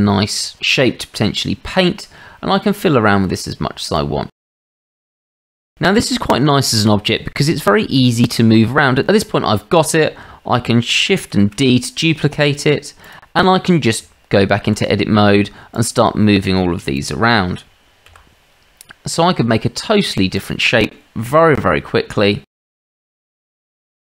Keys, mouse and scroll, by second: 0.1-1.3 shift+middle drag, 2.7 click, 4.1 click, 5.6 click, 9.0 Tab, 11.3 shift+d, 13.4 shift+drag, 14.0 Tab, 18.1 g, 22.9 r.